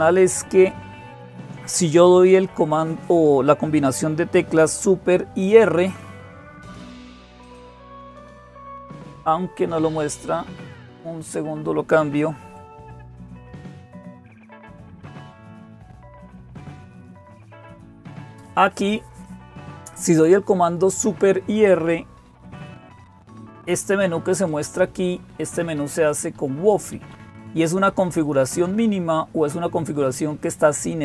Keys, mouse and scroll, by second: 0.0-31.0 typing.